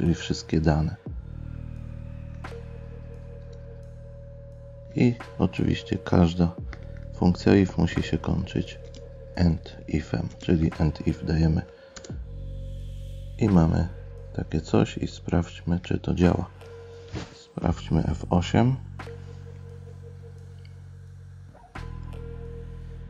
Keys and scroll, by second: 2.9 Delete, 8.8 space, 10.3 space, 12.9 Delete, 19.9 F8, 21.5 F8.